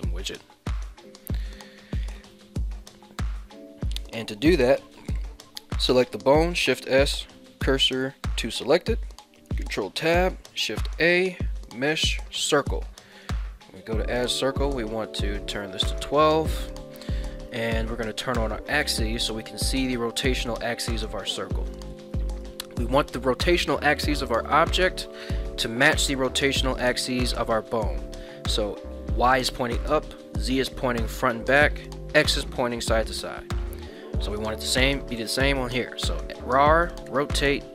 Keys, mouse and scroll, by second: 2.3 shift+middle drag, 6.4 shift+s, 9.5 ctrl+Tab, 10.4 shift+a, 13.2 click, 13.2 shift+a, 14.2-16.4 drag, 18.4 click, 21.8 shift+middle click, 22.2 middle click, 22.6 middle click, 24.3 middle drag, 25.1 shift+middle click, 26.2 shift+middle drag, 26.6 middle click, 34.0 middle click, 36.3 r, 37.1 x.